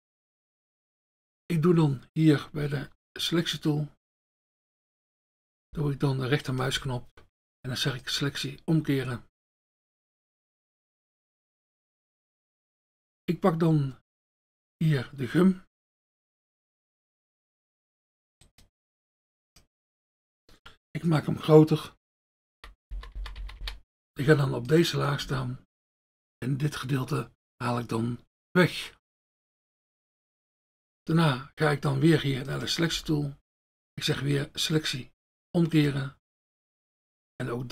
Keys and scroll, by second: 5.7 F1, 6.8 F1, 19.9 F1, 22.0-23.6 typing, 25.2 F1, 33.0 F1.